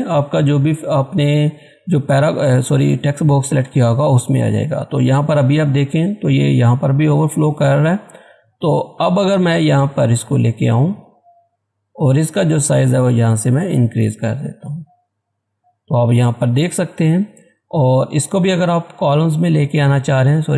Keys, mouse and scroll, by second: 1.5 click, 7.8-8.2 scroll down 1, 8.7-16.1 drag, 16.1 scroll up 1, 20.0 click.